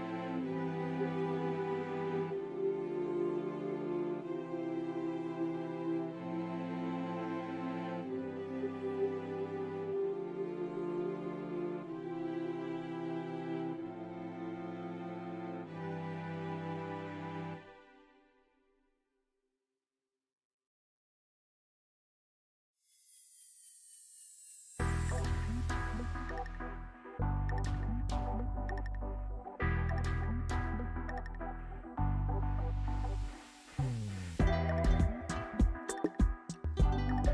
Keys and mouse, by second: 0.6 Tab, 2.0 g, 3.2 click, 3.7 middle click, 4.7 click, 4.9 middle click, 5.0 click, 5.0 right click, 5.5 click, 6.5 shift+d, 7.3 s, 9.4 middle click, 10.2 middle click, 11.3 s, 11.9 middle click, 12.4-13.4 middle drag, 15.7 Tab, 16.7 s, 17.9 alt+z, 18.9 shift+click, 19.4 ctrl+z, 19.4 ctrl+click, 20.2 s, 22.7 g, 24.1 Tab, 24.5 click, 26.3 ctrl+r, 29.4 ctrl+z, 29.9 ctrl+r, 32.8 Tab, 33.1 alt+z, 33.6-34.6 middle drag, 34.9 Tab.